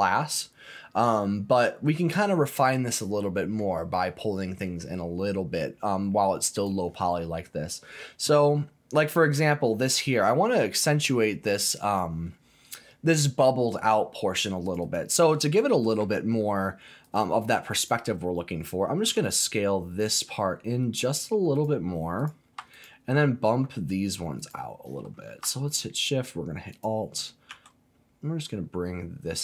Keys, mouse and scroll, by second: 1.2-3.7 middle drag, 6.5 click, 7.4-9.6 scroll up 2, 11.8 click, 14.6 click, 14.8 click, 15.4 click, 17.0 alt+click, 17.8 alt+click, 19.0 s, 21.5 click, 22.2 click, 22.7 alt+click, 24.4 alt+click, 25.7 alt+shift+click, 26.7 alt+shift+click, 27.5 s.